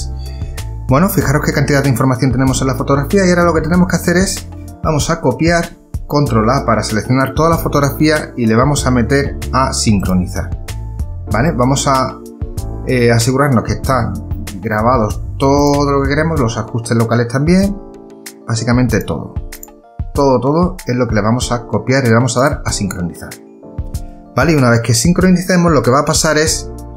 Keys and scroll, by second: 5.6 ctrl+c, 6.8 ctrl+a.